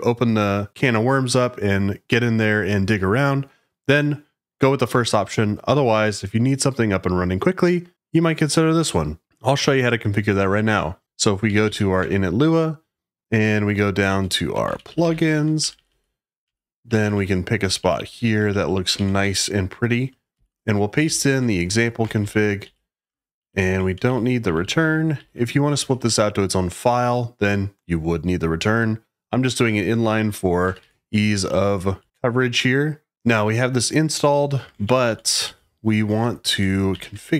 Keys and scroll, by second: 11.0-12.0 typing, 13.7-20.9 typing, 20.2 super+v, 21.2 Escape, 22.1-26.4 typing, 27.6 typing, 30.5-32.6 typing, 34.8-37.3 typing.